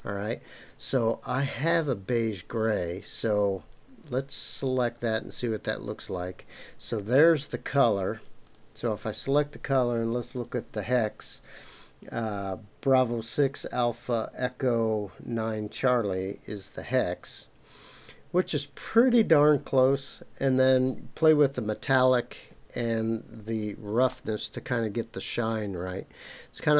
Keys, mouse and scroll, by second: 0.0-4.6 drag, 8.4 click, 24.1-26.7 middle drag.